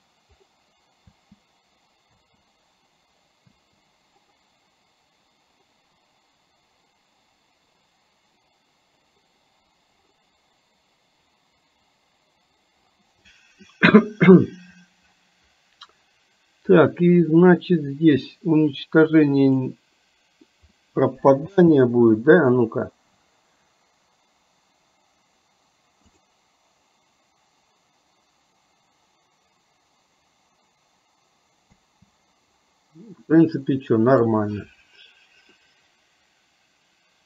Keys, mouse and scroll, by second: 1.3 space, 2.3 space, 19.6 click, 20.8-21.4 middle drag, 21.7 space, 26.3 click, 31.8 space, 33.6-34.3 middle drag, 35.7-37.2 middle drag.